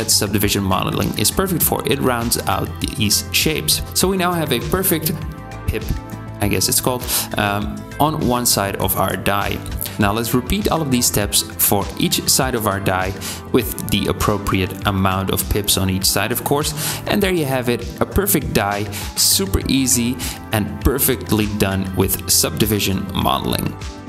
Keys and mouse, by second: 3.1 Tab, 4.4 click, 4.7 shift+click, 5.2 i, 6.0 e, 7.6 Tab, 8.4 Tab, 8.6 middle click, 8.8 shift+middle click, 9.1 i, 9.5 e, 10.3 middle click, 10.9 i, 11.3 e, 13.2 shift+middle click, 13.5 i, 13.8 e, 15.0 shift+click, 15.0 shift+middle click, 15.0 shift+right click, 15.7 i, 16.2 e, 16.7 Tab, 21.3 middle click, 23.5 middle click.